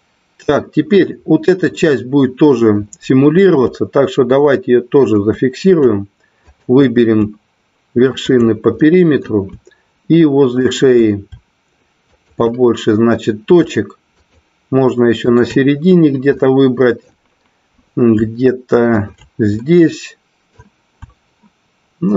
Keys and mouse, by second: 5.0 shift+click, 8.3 shift+click, 8.7 middle click, 10.5 shift+click, 12.0 shift+click, 14.1 shift+click, 16.4 middle click, 19.6 middle click.